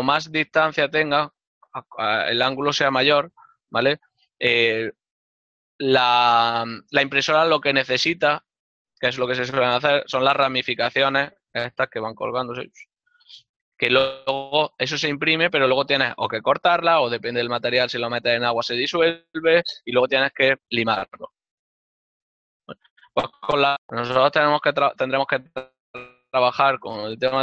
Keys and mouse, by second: 2.2 click, 10.8 d, 13.6 click, 15.2 click, 16.4 click, 24.7 n.